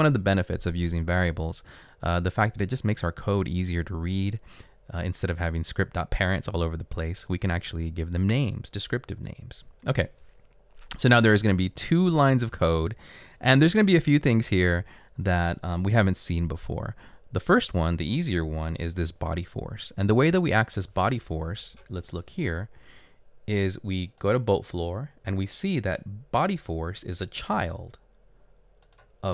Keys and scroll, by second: 12.0-12.8 typing.